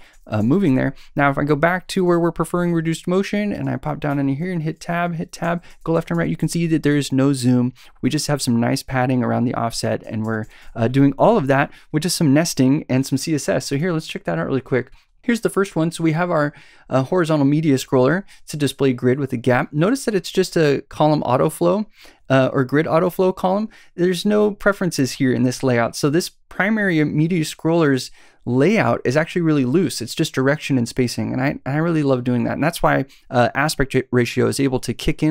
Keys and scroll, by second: 0.4 Left, 4.1 Tab, 5.4 Right, 5.7 Left, 5.9 Right, 6.1 Left, 10.0 Right, 10.2 Left, 10.4 Right, 10.6 Left, 11.6 Left.